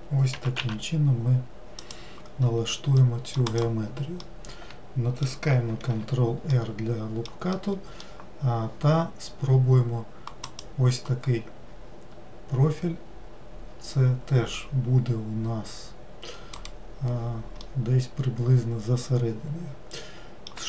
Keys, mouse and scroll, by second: 0.3 g, 3.0 middle click, 3.5 click, 4.2-5.8 middle drag, 5.8 ctrl+r, 17.6-20.6 middle drag.